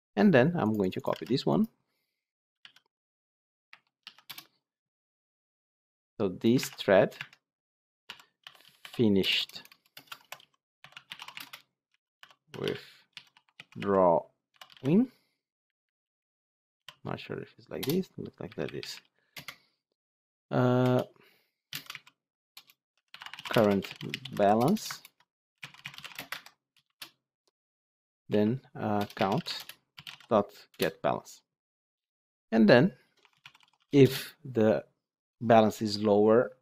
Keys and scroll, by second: 1.0 ctrl+c, 2.5 ctrl+v, 6.5 alt+1, 24.8 ctrl+BackSpace, 29.4 Return.